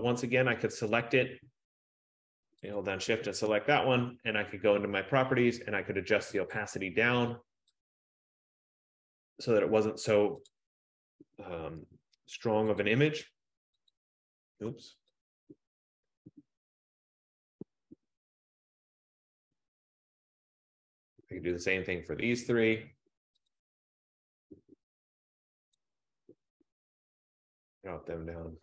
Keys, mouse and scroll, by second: 1.4 click, 3.0 shift+click, 5.1 click, 6.8 click, 8.2 click, 10.6 click, 12.9 shift+click, 14.2 click, 15.8 click, 18.5 click, 18.6 shift+click, 20.1 shift+click, 20.2 shift+click, 21.7 click, 23.7 click, 25.9 click.